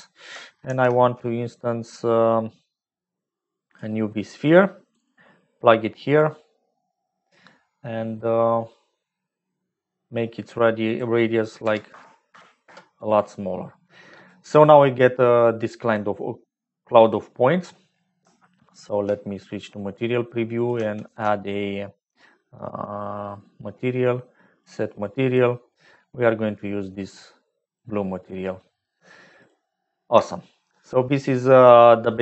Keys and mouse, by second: 0.6 shift+a, 5.1-6.1 drag, 9.9 click, 10.8-13.2 drag, 15.9-17.2 drag, 18.2 z, 20.0 click, 20.5 click, 21.0 shift+a, 27.0 click, 29.0 click, 30.2 shift+middle click, 31.4 middle click.